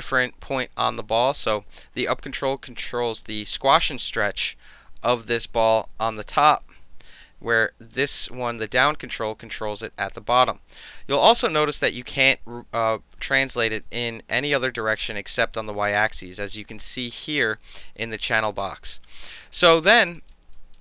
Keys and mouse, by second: 2.1 alt+w, 3.2-6.3 alt+drag, 7.1 ctrl+z, 7.9 click, 9.3 w, 11.1 ctrl+z, 12.1-12.9 drag, 13.4-13.7 alt+drag, 14.6 drag, 19.3-19.7 alt+drag, 20.1 alt+right click, 20.5 alt+click, 20.7 alt+middle drag.